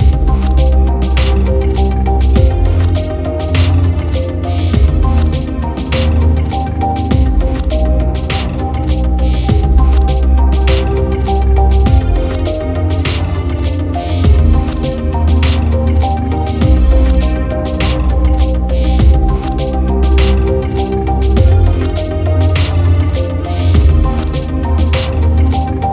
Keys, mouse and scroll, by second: 1.2 space, 2.2 space, 2.9-4.5 drag, 4.5 KP_Decimal, 4.9 Tab, 7.4 KP_7, 9.7 g, 11.8 click, 13.3 KP_7, 14.2 r, 20.7 shift+click, 22.2 Tab.